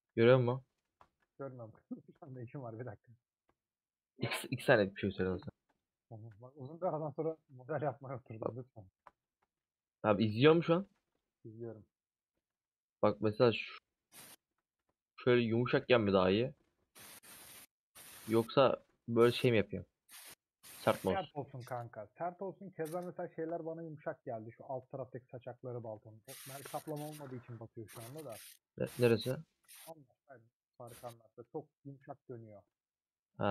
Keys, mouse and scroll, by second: 0.0 a, 0.1 middle click, 0.8 3, 1.2-2.7 middle drag, 2.7 alt+click, 3.5 ;, 4.5 click, 4.9 middle click, 5.4 3, 5.6-6.8 alt+drag, 6.8 ;, 8.1 click, 8.6-8.9 scroll up 2, 9.0 3, 9.1-10.3 alt+drag, 10.3 ;, 10.7 2, 11.8 click, 12.4 alt+z, 12.7-13.7 middle drag, 13.7-14.3 scroll up 5, 14.3 middle click, 14.7 alt+z, 14.9 middle click, 15.3 3, 15.3 click, 15.6 x, 16.2 middle click, 16.6-17.9 scroll down 1, 17.9 alt+click, 18.8 ;, 19.3 middle click, 19.8 2, 20.9 click, 21.4 3, 21.6-23.2 alt+drag, 24.0 middle click, 24.6 alt+z, 24.9 middle click, 25.5 alt+z, 25.9 a, 27.1 u, 27.9-28.5 scroll down 4, 28.5 Tab, 28.5-31.4 middle drag, 31.4 /, 33.3 click.